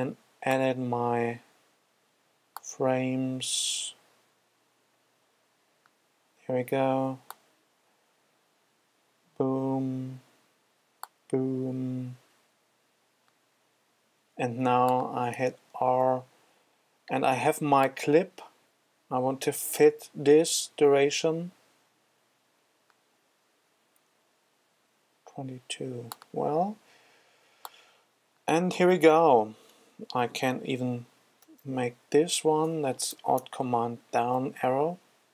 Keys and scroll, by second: 16.3 super+r, 31.3 alt+super+Down.